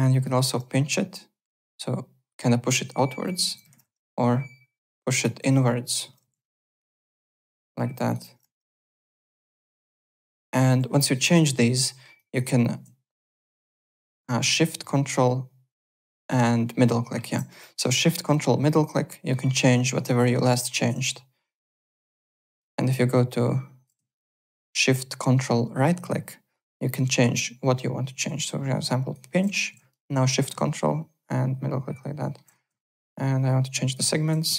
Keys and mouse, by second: 0.0-0.3 typing, 0.1 click, 0.4 KP_Enter, 3.2 click, 3.5 KP_0, 3.6 KP_Decimal, 3.8 KP_Enter, 4.9 click, 5.5 KP_Subtract, 6.0 KP_0, 6.2 KP_Decimal, 6.3 KP_1, 6.7 KP_Enter, 6.8 Return, 7.7 click, 8.3 KP_5, 8.4 Return, 9.6 click, 9.8 KP_0, 9.9 Return, 10.4 click, 11.8 middle click, 12.1 alt+click, 13.6 alt+middle click, 13.9 alt+right click, 14.8 ctrl+shift+middle click, 15.3 ctrl+shift+m, 17.6 click, 18.6 middle click, 21.1 right click, 21.9 right click, 22.9 shift+right click, 24.1 ctrl+shift+right click, 30.4 ctrl+shift+middle click, 30.9 ctrl+shift+m, 32.9 ctrl+shift+right click.